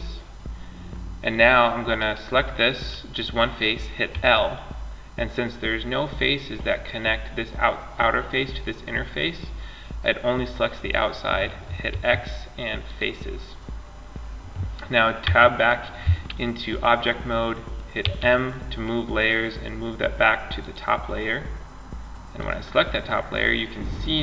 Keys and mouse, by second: 1.2-3.1 drag, 3.3 l, 3.7 middle click, 11.1 x, 14.4 Tab, 17.2 m, 21.6-23.7 drag, 23.7-24.2 middle drag.